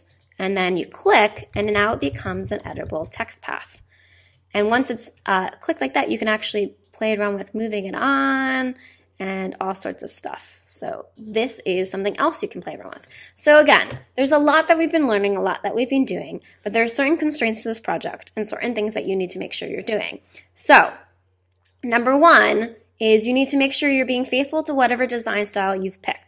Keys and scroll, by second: 1.1-3.5 typing.